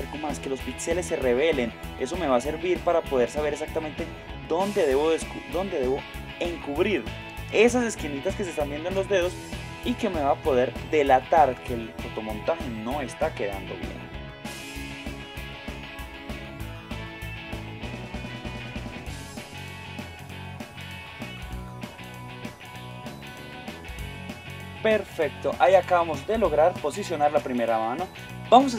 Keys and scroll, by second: 7.5 space, 10.8 space, 14.3 space, 17.1 space, 17.9 space, 19.2 space, 20.6-23.2 typing.